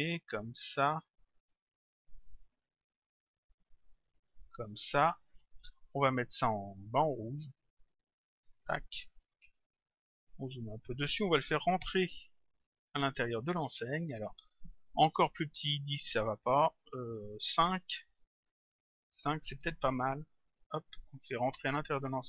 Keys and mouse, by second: 2.1 click, 3.3 click, 6.5 click, 12.9 click, 15.1 click, 17.9 Return, 20.1 click.